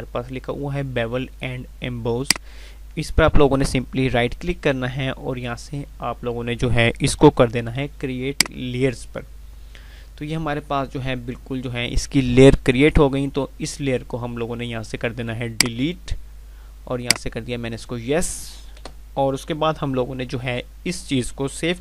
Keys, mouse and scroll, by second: 19.7 F5, 21.7 ctrl+s.